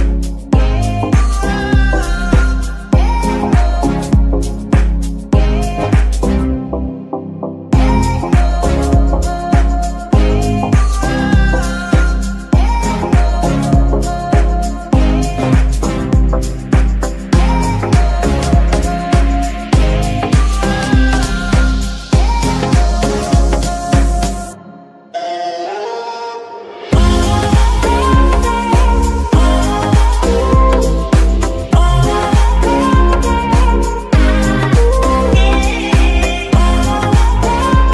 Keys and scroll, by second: 0.0 g, 0.4 Escape, 2.8 g, 3.1 Escape, 4.4 r, 5.0 Escape, 9.3 g, 9.9 Escape, 11.1 g, 11.7 Escape, 14.6 g, 15.2 Escape, 19.7 g, 20.7 Escape, 22.9 g, 23.4 Escape, 27.9 Escape, 29.4 g, 30.0 Escape, 30.6 g, 31.0 Escape, 31.3 g, 31.8 Escape, 32.6 g, 33.6 Escape, 34.3 g, 34.7 Escape, 35.3 g, 35.8 Escape, 36.5 g, 37.0 Escape.